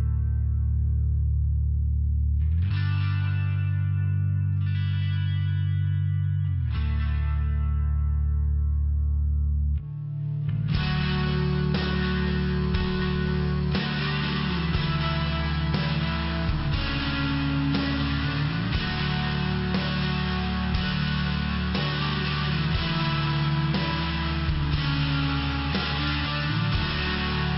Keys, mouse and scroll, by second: 0.0 click, 0.1 click, 0.5 click, 1.4 click, 4.5 click, 5.7 click, 6.4 click, 7.7 click, 9.9 click, 12.8 click, 14.4 click, 15.4 click, 16.7 click, 17.5 click, 18.1 click, 19.0 click, 24.4 click, 24.7 click, 27.3 click.